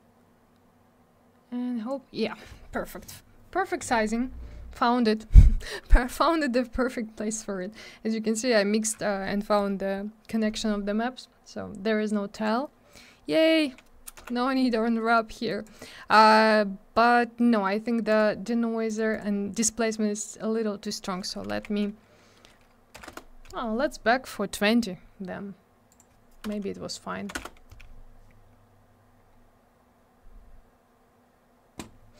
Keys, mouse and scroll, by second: 12.3 click, 14.1 m, 15.4 click, 18.1 click, 18.8 click, 18.9 click, 19.1 click, 19.1 click, 20.8 click, 20.9 click, 20.9 click, 21.0 click, 21.5 2, 22.9 0, 23.0 Return, 25.9 click, 25.9 click, 26.4 BackSpace, 27.3 2, 27.3 Return, 29.1-29.5 scroll up 1, 30.3-31.3 scroll down 1.